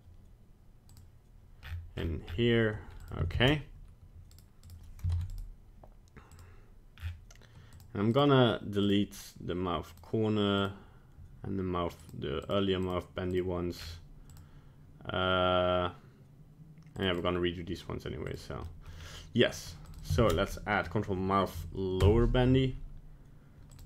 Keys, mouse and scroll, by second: 0.9 click, 1.6-2.9 scroll up 23, 3.0 click, 4.7 right click, 5.2 ctrl+Tab, 5.3 right click, 6.3 click, 7.0 scroll down 9, 7.8 click, 8.1 click, 8.8 click, 9.9 click, 10.6 click, 12.0 click, 12.4 click, 12.8 click, 13.3 click, 13.8-14.3 scroll down 5, 14.3 click, 17.0 click, 17.2 click, 18.3 click, 18.7 middle click, 18.8 middle click, 19.0 scroll down 2, 19.9 click, 20.0 click, 23.7 click.